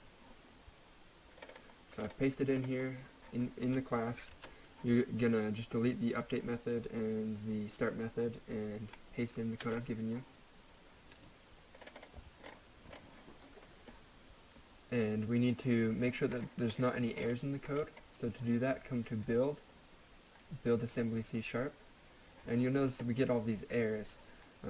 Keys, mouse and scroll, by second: 1.3-2.2 scroll up 1, 4.3 ctrl+z, 5.4 click, 8.9 click, 9.6 ctrl+f, 11.2 click, 11.8-12.9 scroll up 1, 16.0-17.1 scroll down 1, 17.1-18.3 scroll up 1, 19.2 click.